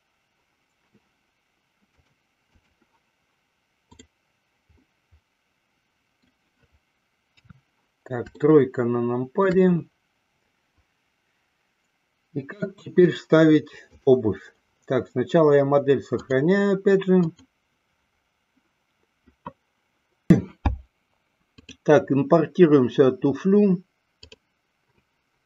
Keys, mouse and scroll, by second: 2.1-2.9 drag, 4.9-6.3 middle drag, 7.3 KP_3, 8.3-9.5 shift+middle drag, 13.9 click, 16.4-17.5 drag, 21.6-24.8 drag.